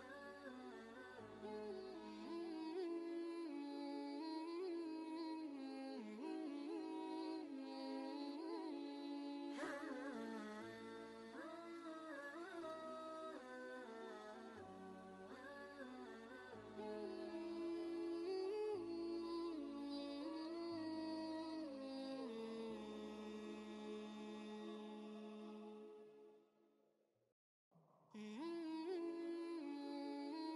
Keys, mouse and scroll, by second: 0.2 space, 0.4-4.9 drag, 4.9 v, 6.4 click, 12.4 click, 15.7 click, 15.7 click, 26.1 g, 26.5 ctrl+space, 26.8 ctrl+click, 27.1 ctrl+space, 28.6-30.5 shift+drag.